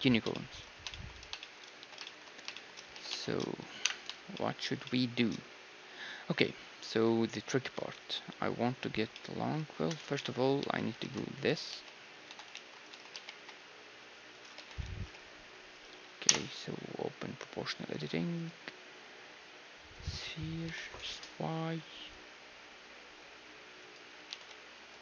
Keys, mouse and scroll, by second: 1.8 z, 3.0 z, 3.8 KP_1, 5.0-7.0 middle drag, 9.1-11.7 middle drag, 9.5 z, 10.2 KP_3, 10.6 z, 11.0 ctrl+Tab, 11.7-13.2 typing, 12.5 ctrl+r, 13.1-14.9 right drag, 14.5-16.7 drag, 14.5 s, 16.2 o, 18.3-20.2 drag, 20.7 s.